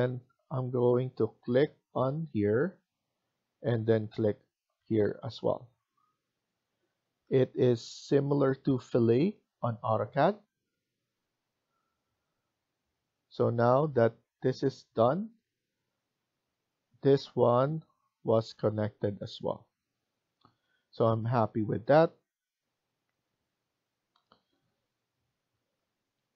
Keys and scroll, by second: 11.8 Escape, 12.1 Escape.